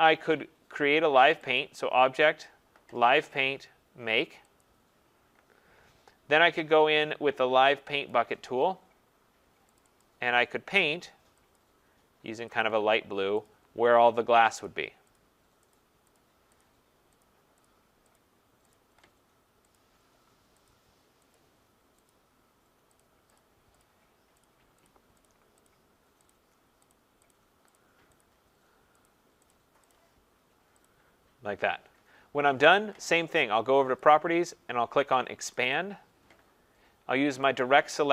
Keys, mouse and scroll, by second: 1.6 click, 4.6 click, 8.1 click, 9.8 click, 10.0 click, 11.6 click, 12.6 click, 13.5 click, 14.6 click, 15.2 click, 15.8 click, 16.2 click, 16.6 click, 17.2 click, 17.6 click, 18.2 click, 18.7 click, 19.8 click, 20.7 click, 21.3 click, 22.1 click, 23.0 click, 23.4 click, 23.8 click, 24.4 click, 24.9 click, 25.3 click, 25.7 click, 26.4 click, 27.0 click, 27.3 click, 27.8 click, 28.2 click, 29.1 click, 29.5 click, 30.0 click, 30.9 click, 34.1 click, 35.8 click, 37.6 click.